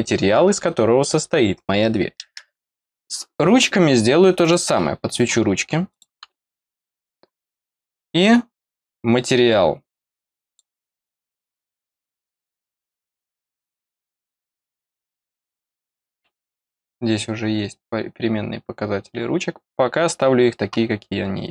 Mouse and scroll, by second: 4.3 click, 5.8 click, 10.4 click, 16.0 click.